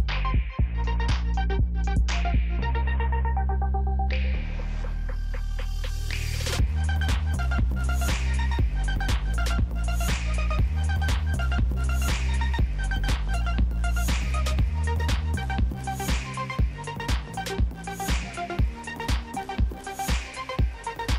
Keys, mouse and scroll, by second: 12.9 click, 16.1 ctrl+a, 21.0 ctrl+d.